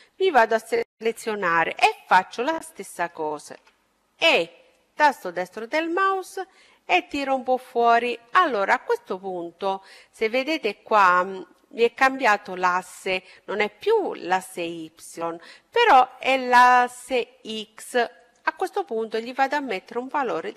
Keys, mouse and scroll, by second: 3.3 e, 5.1-6.8 drag, 17.0-19.1 drag.